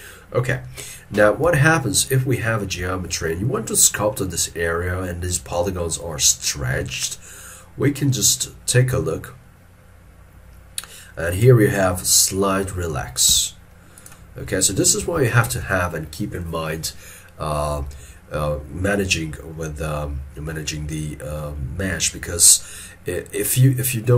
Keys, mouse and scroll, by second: 1.5 alt+e, 2.2 scroll up 1, 3.0 shift+middle click, 7.9 scroll down 1, 13.4 f, 15.1 alt+e, 15.6 alt+e.